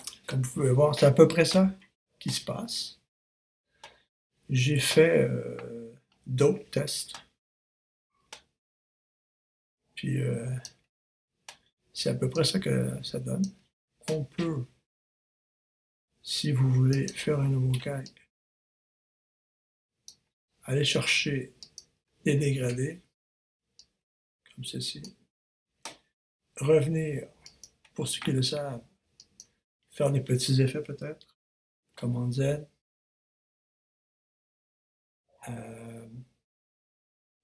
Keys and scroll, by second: 31.5 super+z.